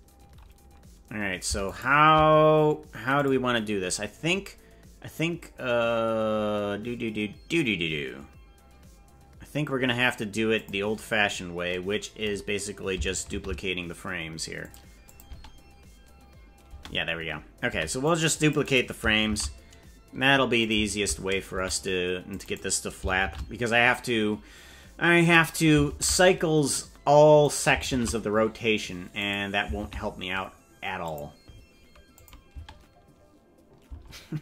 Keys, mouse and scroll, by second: 1.6 shift+right click, 3.1 click, 3.9-4.5 scroll down 5, 10.5 click, 13.3 shift+d, 15.0 click, 15.2 space, 16.6 space, 17.6 c, 19.4 shift+d, 21.6 c, 23.2 shift+d, 26.0 shift+d, 28.0 shift+d, 29.8 shift+d, 32.1 click, 32.6 space, 34.0 space.